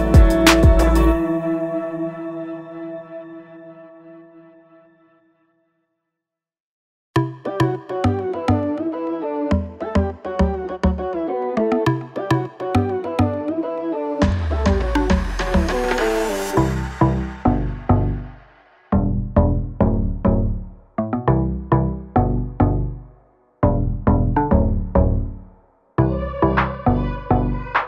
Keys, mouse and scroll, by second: 3.6 click, 10.3 click, 12.0 shift+click, 13.6 click, 23.1 click, 27.7 click.